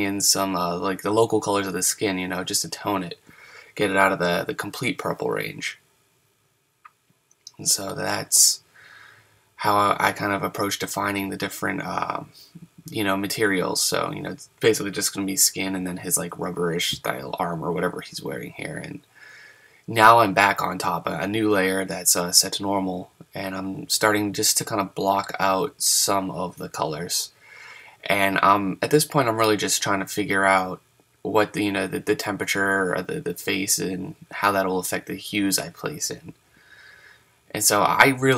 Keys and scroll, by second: 4.9 ctrl+z, 5.5 super+z, 7.2 super+z.